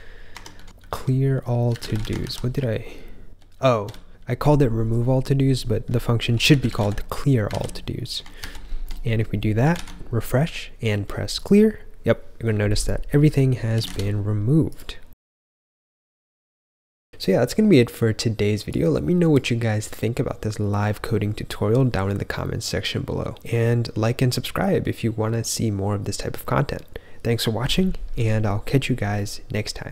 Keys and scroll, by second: 0.3 Escape, 0.6 typing, 2.1 ctrl+f, 2.6-4.1 typing, 6.2-7.2 typing, 7.4 super+s, 8.3 ctrl+j, 8.6 ctrl+j, 9.7 super+r, 13.4-14.3 typing.